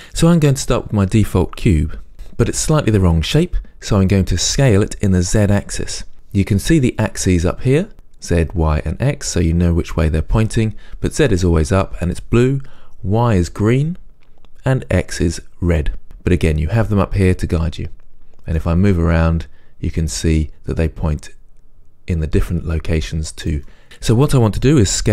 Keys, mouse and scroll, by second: 18.6-25.1 middle drag.